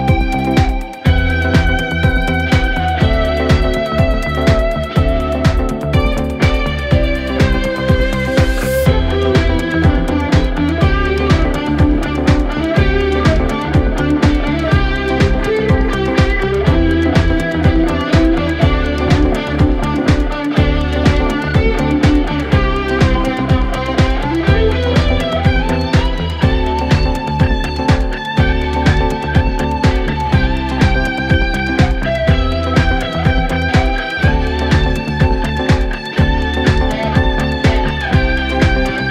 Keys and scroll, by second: 7.8 Delete, 15.6 F9, 19.2 ctrl+d, 19.3 Escape, 21.0 Delete, 23.4 ctrl+z, 26.6 Escape.